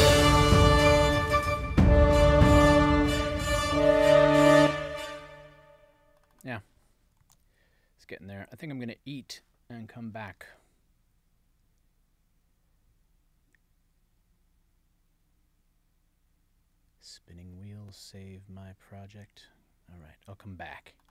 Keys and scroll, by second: 4.6 space, 7.2 super+s.